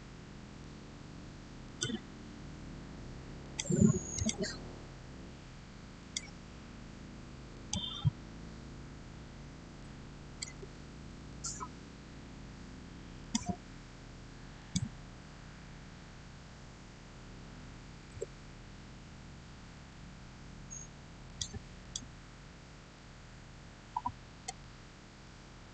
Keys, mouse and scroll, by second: 1.5 click, 10.4 typing, 11.0 Return, 13.1 click, 17.5 6, 17.9 Return, 21.1 Return, 21.1 click, 23.4 scroll down 1, 25.1-25.7 shift+middle drag.